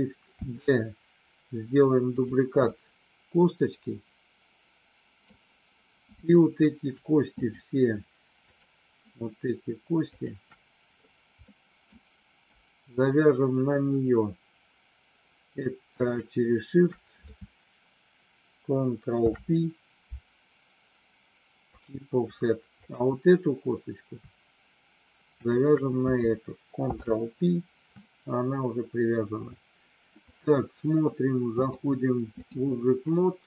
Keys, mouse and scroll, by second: 0.5 shift+d, 2.1 click, 2.7-5.3 middle drag, 6.1 click, 7.2 shift+click, 8.3 shift+click, 10.1 shift+click, 11.5 middle click, 15.9 shift+click, 19.1 ctrl+p, 22.7 click, 25.3 shift+click, 26.7 ctrl+p, 31.5-32.5 drag.